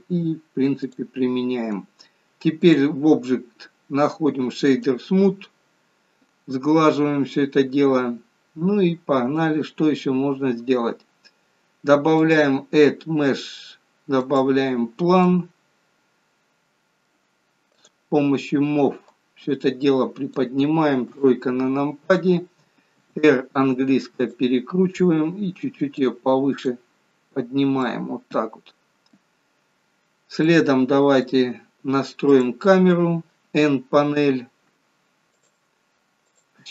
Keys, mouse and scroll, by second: 0.9 click, 4.9 click, 8.8-9.6 scroll down 1, 9.6-10.2 scroll down 5, 10.2-12.2 scroll up 3, 12.2 click, 12.2-13.2 scroll, 13.2-13.6 scroll up 4, 15.3 middle click, 17.9 click, 19.1 click, 21.2 KP_3, 23.0 r, 26.0 click, 27.9 middle click, 29.8-30.5 scroll down 5, 30.5 middle click, 32.4 click, 34.1 n, 35.4 click, 36.3 click.